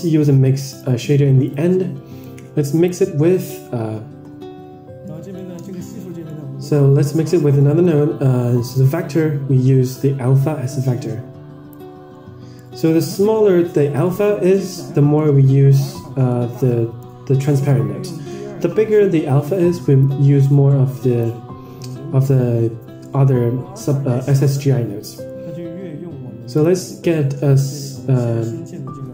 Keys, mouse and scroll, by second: 2.5-3.3 drag, 4.8 scroll up 4, 5.0 middle click, 5.3-6.2 scroll down 8, 6.2-6.6 middle drag, 7.5 middle drag, 8.9-12.0 drag, 12.6-13.2 middle drag, 13.3-14.0 scroll up 4, 14.0-14.5 middle drag, 15.1-15.6 middle drag, 15.7 middle click, 16.2-16.8 middle drag, 18.8-19.3 scroll up 4, 20.1 click, 23.0 middle click, 24.3 shift+a.